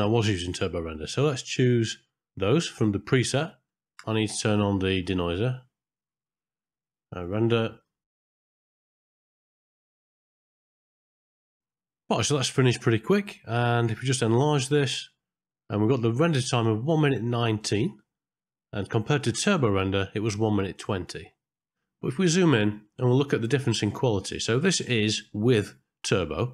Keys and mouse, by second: 5.1 click, 7.3 click, 8.9 middle click, 14.9 ctrl+space, 18.9 click.